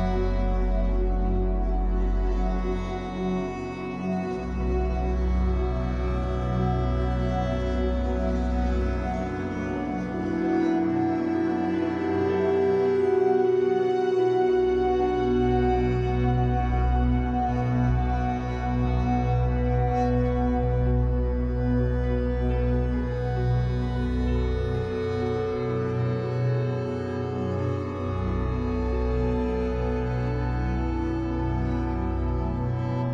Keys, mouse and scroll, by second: 5.5-5.8 scroll down 2, 5.8-9.8 middle drag, 6.2 scroll down 2, 7.2-7.6 scroll up 2, 8.0 scroll up 2, 8.7 scroll up 2, 9.8-15.2 drag, 15.2 middle click, 16.1-21.3 drag, 21.3-22.5 middle drag, 22.5-27.3 drag, 26.9-27.3 scroll down 2, 27.3-32.3 middle drag, 28.1-30.2 scroll up 6, 30.2-30.8 scroll up 1, 32.3-33.1 drag.